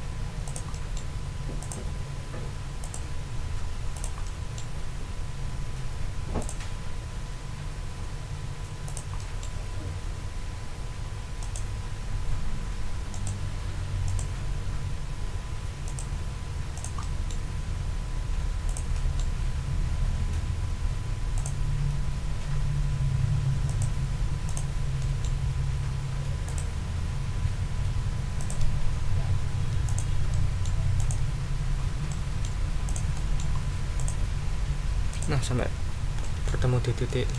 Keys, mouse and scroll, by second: 0.4-1.1 drag, 1.6 click, 2.8 click, 3.9 click, 4.2 middle click, 6.4 click, 8.8 click, 11.4 click, 13.1 click, 14.1 click, 15.8 click, 16.8-17.5 drag, 18.6-19.4 drag, 21.3 click, 23.7 click, 24.4 click, 25.0 middle click, 26.4 click, 28.4 click, 28.8-29.1 ctrl+scroll down 2, 31.8 ctrl+scroll down 1, 32.1 ctrl+middle click, 32.9 ctrl+click, 33.1 ctrl+middle click, 33.9 ctrl+click, 35.1 click, 35.7 ctrl+scroll down 2, 36.2 ctrl+right click, 37.1 ctrl+right click.